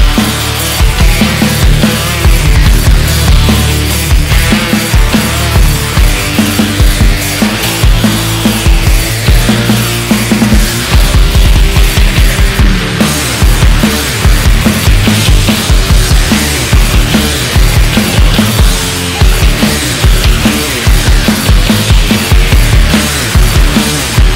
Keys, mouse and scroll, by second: 0.7 Tab, 1.1-1.5 scroll down 1, 1.5-3.3 middle drag, 3.3 KP_1, 3.9-4.4 shift+middle drag, 4.4-4.8 scroll down 2, 4.8-5.9 scroll up 1, 5.9-6.4 shift+middle drag, 6.4 alt+z, 18.5-18.9 scroll down 1, 18.9-21.0 middle drag, 21.0-21.3 scroll up 1, 21.3 Tab, 21.6 middle click, 22.1 scroll up 2, 22.3 middle click, 23.1 click.